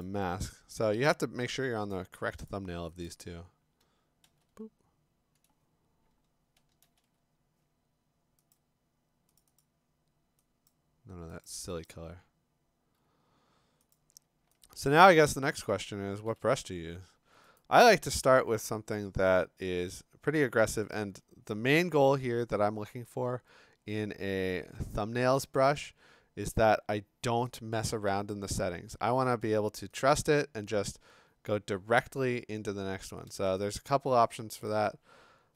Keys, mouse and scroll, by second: 0.0 click, 1.1 click, 1.9 click, 2.5 click, 3.1 click, 4.2 alt+BackSpace, 6.8 alt+BackSpace, 8.5 click, 9.4 click, 9.6 click, 10.7 click, 11.5 click, 11.9 click, 13.9 click, 15.2 click, 16.3 b, 17.0 scroll, 17.6 right click, 20.9 click, 30.2 click, 33.8 click, 33.9 click, 35.4 F5.